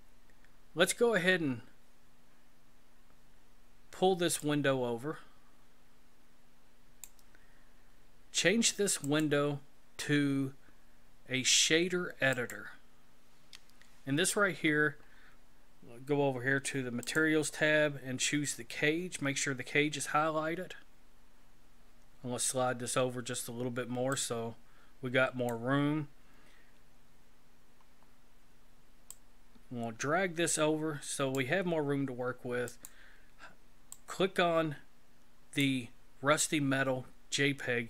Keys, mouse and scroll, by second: 4.4 click, 9.0 click, 14.0-17.0 scroll up 5, 17.0 click, 20.6-23.6 scroll up 1, 24.1 click, 27.8 scroll up 5, 29.1 click, 32.7 click, 33.9 click.